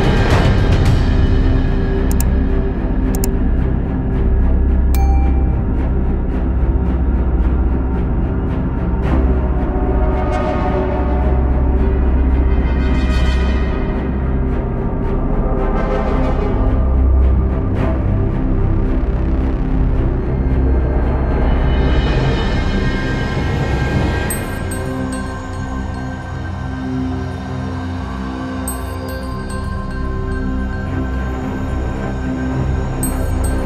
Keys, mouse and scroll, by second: 0.0-0.7 scroll down 1, 8.7 middle click, 9.5 i, 15.2 KP_1, 16.7 e, 18.6 s, 19.3 KP_3, 20.9 shift+middle click, 21.3-21.7 scroll up 1, 21.7 shift+middle click, 22.3 s, 26.1 KP_3, 27.9 middle click, 28.5-29.1 scroll up 1, 29.1 i, 32.2 KP_1, 32.8 e.